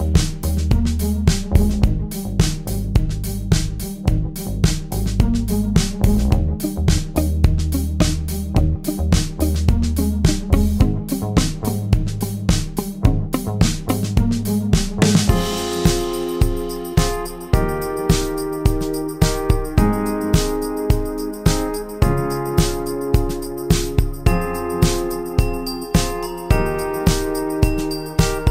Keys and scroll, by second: 1.3 End, 1.8-2.7 typing, 6.0 -, 6.6 space, 14.1 +, 16.6-17.4 typing, 23.0 -, 23.7 space, 27.9 space.